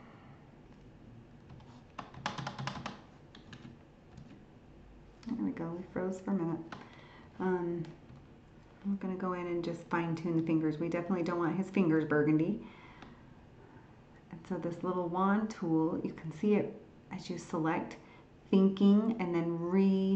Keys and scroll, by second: 3.5 alt+Tab.